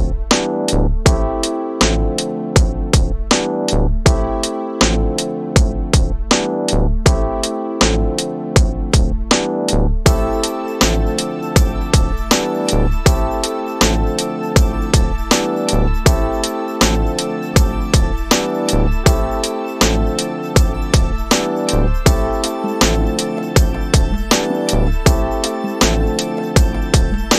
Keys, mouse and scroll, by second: 2.7-5.9 drag, 7.1 click, 10.6 click, 16.8 click, 19.9-20.9 middle drag, 22.8 click, 25.3 click.